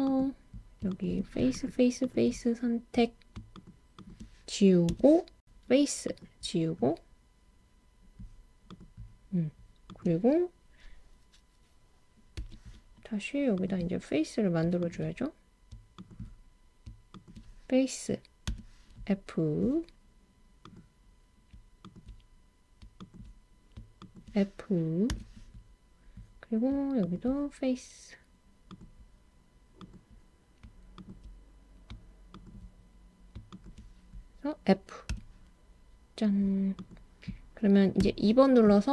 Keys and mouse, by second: 0.9 shift+click, 1.5 shift+click, 2.0 shift+click, 4.0 shift+click, 4.6 super+z, 4.6 x, 4.8 x, 13.5 click, 14.9 shift+click, 15.9 shift+click, 18.5 f, 20.6 click, 21.9 shift+click, 23.1 shift+click, 24.1 shift+click, 25.1 f, 27.0 shift+click, 29.9 click, 30.9 shift+click, 32.3 shift+click, 33.6 shift+click, 35.1 f, 36.9 click, 38.0 2.